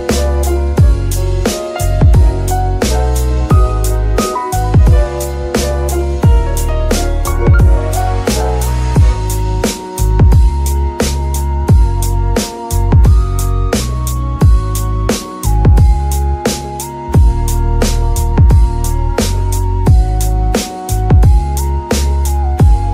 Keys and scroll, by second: 7.0 KP_3.